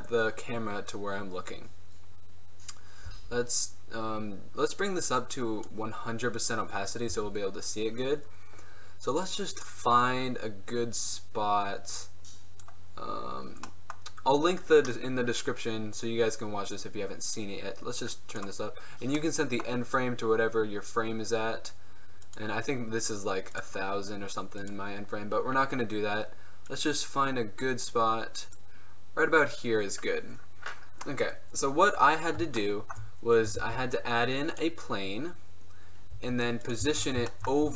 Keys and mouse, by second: 2.2-5.2 middle drag, 3.2 n, 5.2-7.2 drag, 7.2 n, 14.1-14.6 drag, 14.6-16.6 middle drag, 17.4-25.6 drag, 27.2 click, 32.8 click, 33.0 middle click, 33.2 middle click, 33.6 shift+a, 36.2 g, 36.9 z.